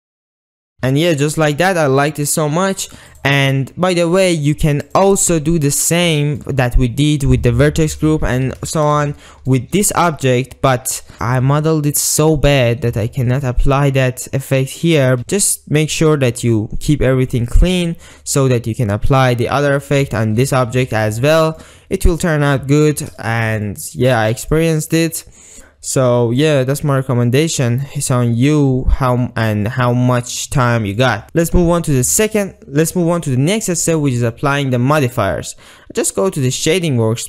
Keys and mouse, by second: 0.1 ctrl+s, 0.2 Tab, 0.3 drag, 0.6 alt+shift+z, 1.0-1.8 drag, 3.2 click, 4.4-6.0 drag, 6.2 shift+drag, 8.8 alt+shift+z, 9.3 Tab, 9.6 drag, 10.0 alt+z, 10.3-11.1 middle drag, 11.2 alt+shift+click, 12.4 shift+click, 13.2 shift+click, 20.1 Tab, 20.9 alt+z, 21.2-21.7 middle drag, 22.0-22.3 ctrl+middle drag, 22.5-23.0 shift+middle drag, 23.3 shift+middle click, 23.7-24.1 ctrl+middle drag, 24.3 middle click, 24.5 click, 26.5 click, 27.1-28.1 drag, 28.6 drag, 28.8 middle click, 29.2-29.6 ctrl+middle drag, 29.7-30.3 middle drag, 30.7-31.1 middle drag, 31.2-32.5 middle drag, 34.4-34.9 middle drag.